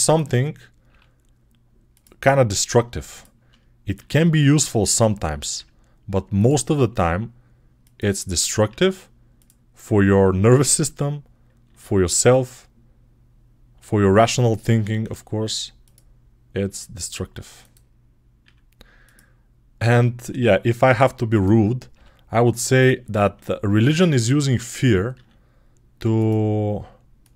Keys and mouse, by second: 0.7 g, 2.4 click, 2.5 middle click, 3.0 shift+click, 3.0-14.6 shift+middle drag, 4.0 e, 5.4 r, 6.7 g, 8.5 e, 10.0 r, 11.5 s, 13.6 e, 14.9 r, 16.5 s, 18.3 e, 19.6-26.3 middle drag, 20.0 r, 21.8 g, 23.2 s, 25.0 e, 27.1 click.